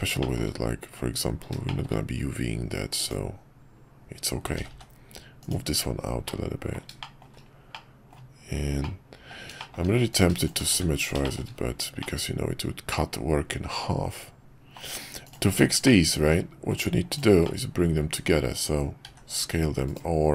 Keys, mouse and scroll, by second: 0.2 middle click, 1.7 middle click, 3.0 click, 4.6 g, 6.3 middle click, 7.1 shift+middle click, 7.8 middle click, 9.0 middle click, 9.7 shift+middle click, 10.1 click, 10.7 shift+1, 11.2 shift+middle click, 12.0-14.7 middle drag, 15.2 click, 15.8 middle click, 17.1 shift+click, 17.4 middle click.